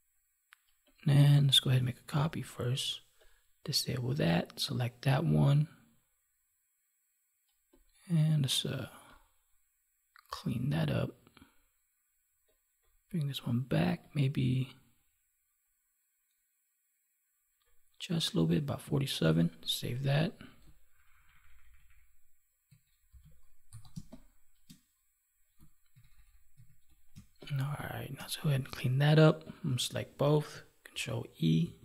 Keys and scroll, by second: 2.0 ctrl+j, 19.1 ctrl+s, 20.9 ctrl+-, 22.6 ctrl+=, 23.8 space, 25.8 ctrl+=, 30.9 ctrl+e.